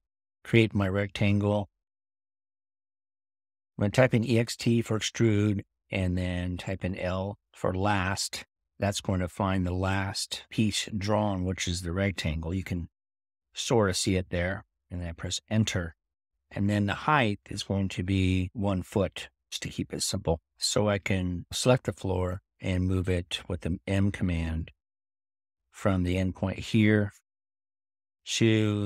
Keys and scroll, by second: 0.0-0.7 typing, 3.5-4.3 typing, 9.4 l, 23.7 m.